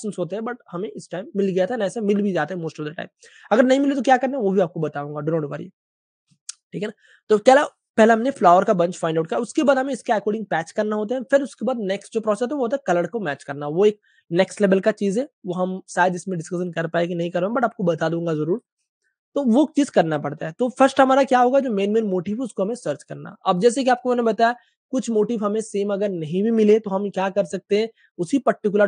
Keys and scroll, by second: 6.4 space, 18.8 typing, 20.4 super+space, 20.5 super+space, 20.9 typing, 24.1-24.8 typing.